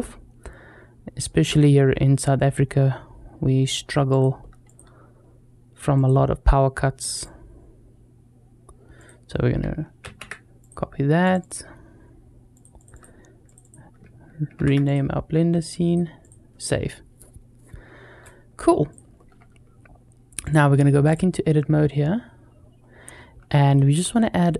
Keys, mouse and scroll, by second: 18.7 click, 20.2-21.0 drag, 22.6 scroll up 2, 23.6 shift+middle click, 23.9 middle click.